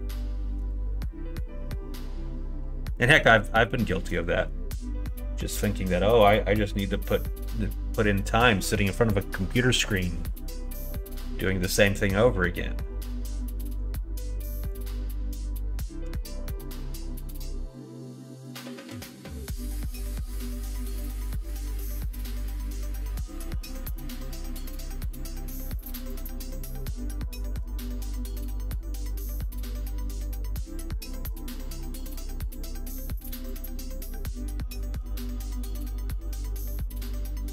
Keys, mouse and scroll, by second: 0.5 x, 16.1 ctrl+z, 16.7 middle click, 17.1 middle click, 18.4 middle click, 19.4 middle click, 20.0 shift+middle click, 20.7 middle click, 21.5 middle click, 22.1 click, 24.5 l, 25.3 p, 26.4 Tab, 26.8 click, 30.4 middle click, 32.8 middle click, 33.3 shift+middle click, 34.0 middle click.